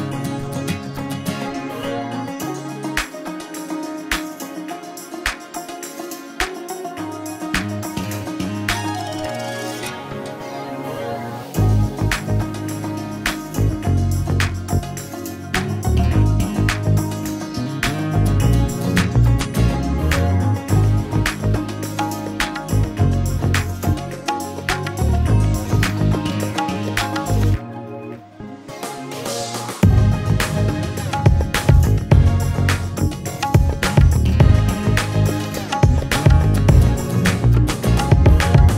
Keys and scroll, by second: 3.7 ctrl+z, 7.8 ctrl+space, 9.8 ctrl+a, 17.1 ctrl+space, 33.6 ctrl+a.